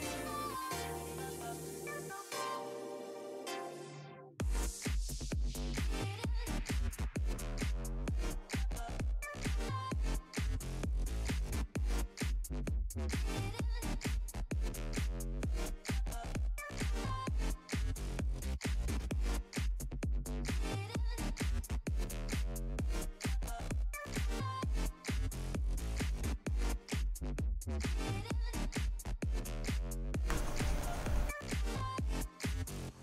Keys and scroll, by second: 2.2 s.